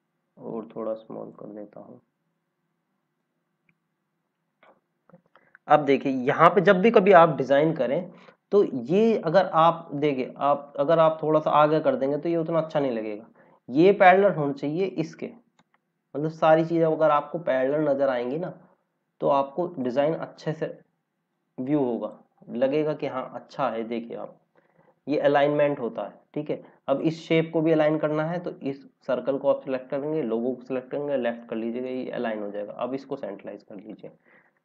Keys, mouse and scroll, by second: 0.6 click, 5.3 scroll down 1, 6.1 click, 7.8 scroll up 1, 8.9 click, 14.7 click, 16.1 l, 17.0 click, 22.5 scroll down 1, 26.8 click, 27.7 scroll up 1, 29.9 click, 30.8 l, 34.1-34.6 typing.